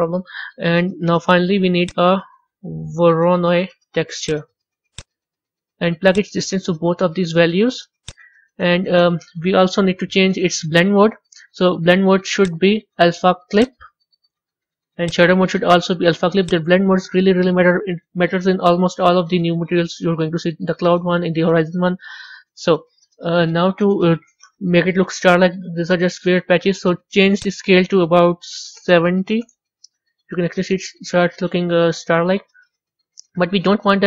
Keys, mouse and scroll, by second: 0.4-6.8 middle drag, 6.8-8.1 drag, 11.0-12.4 scroll down 4, 13.7-18.6 drag, 25.0-29.5 middle drag, 29.5-30.8 drag, 30.8 scroll up 2, 31.3-34.0 middle drag.